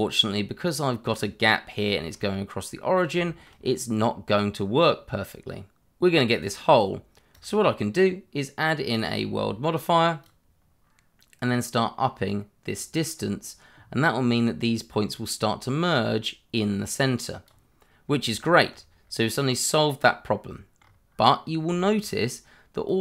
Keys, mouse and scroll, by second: 1.9 shift+middle click, 2.0 middle click, 2.8 scroll down 1, 3.2 shift+middle click, 3.6 scroll up 1, 6.3 click, 10.2 click, 18.4 shift+middle click, 19.0 scroll down 1, 20.7 scroll up 1, 21.7 shift+middle click, 22.8 click.